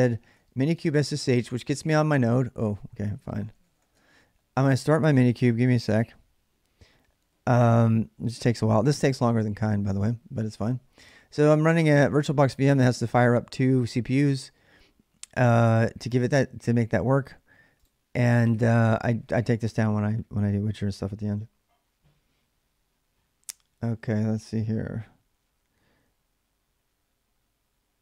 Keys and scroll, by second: 0.0-1.4 typing, 2.6-4.1 typing.